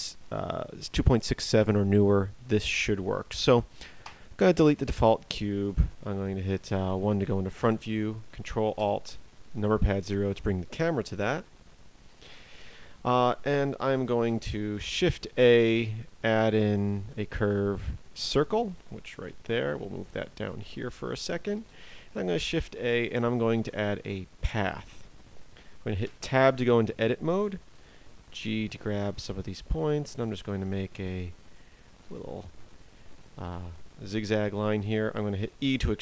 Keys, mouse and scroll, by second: 3.9 Delete, 3.9 right click, 6.7 KP_1, 8.7 ctrl+alt+KP_0, 14.7 shift+a, 19.2 g, 21.5 shift+a, 25.9 Tab, 26.9 click, 27.7 g, 28.9 click, 29.0 g, 35.4 e.